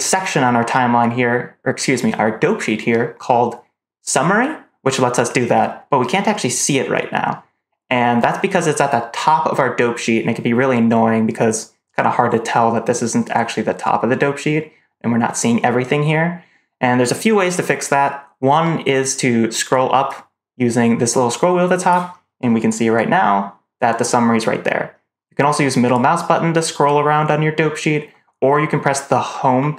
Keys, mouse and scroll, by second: 20.0-21.8 drag, 25.8-28.2 middle drag, 29.3 Home.